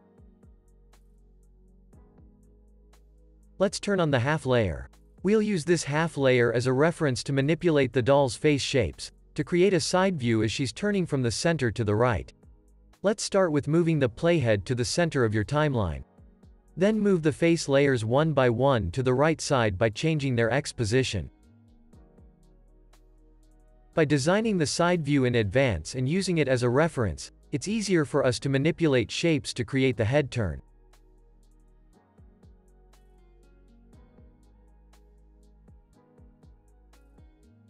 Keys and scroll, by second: 6.0 super+=, 7.5 space, 13.5 p, 17.6 super+z, 19.2 p, 27.3 Left, 34.6 p.